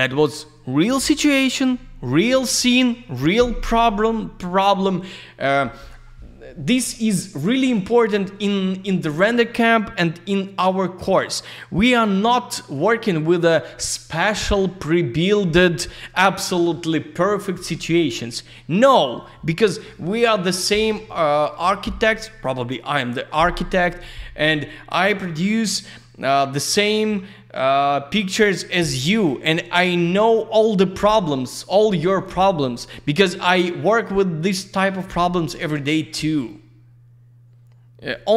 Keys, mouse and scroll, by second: 7.3 click, 7.4 click, 11.1 click, 17.6 ctrl+v.